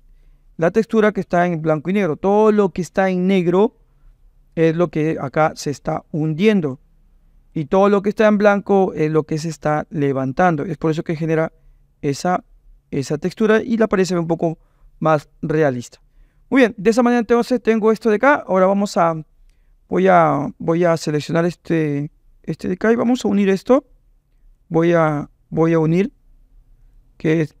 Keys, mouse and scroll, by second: 4.7-5.1 drag, 5.1 middle click, 6.8 middle click, 10.5-13.5 middle drag, 23.5 click, 24.4-27.6 drag.